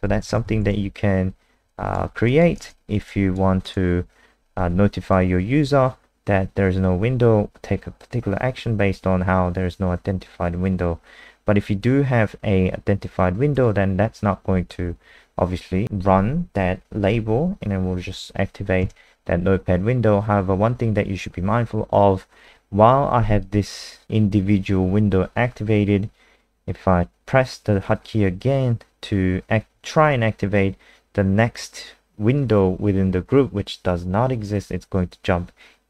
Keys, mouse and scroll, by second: 0.0-1.0 typing, 1.7 alt+click, 2.3 click, 2.6 ctrl+alt+space, 3.1 alt+click, 3.6 click, 18.8 KP_0.